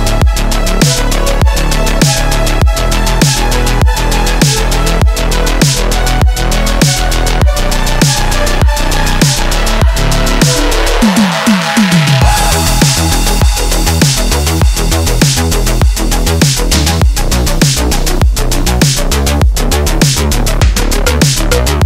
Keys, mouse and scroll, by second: 0.0 ctrl+click, 7.4 click, 10.2 alt+scroll up 1, 10.5 space, 10.6-11.0 click, 10.9 space, 11.3 click, 11.4-11.8 space, 13.8 click, 14.3 ctrl+z, 15.9-17.8 drag, 19.3-20.9 typing.